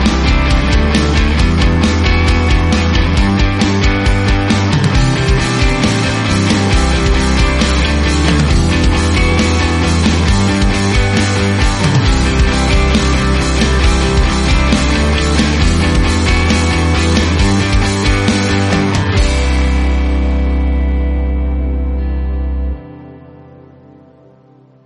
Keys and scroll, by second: 6.1 ctrl+v, 7.2-8.5 typing, 9.6 shift+9, 9.9 2, 10.1 Right, 10.3 shift+0, 10.4 Return.